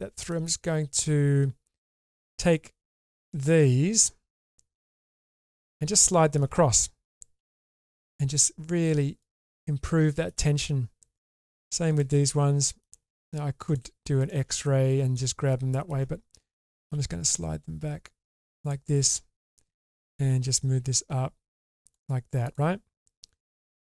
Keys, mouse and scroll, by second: 1.7 middle click, 3.5 middle click, 5.4 middle click, 7.3 g, 9.6 middle click, 11.1 click, 11.9 shift+click, 12.2 middle click, 14.5-15.9 middle drag, 16.9 g, 19.9 click, 21.0 click, 23.6 shift+middle click.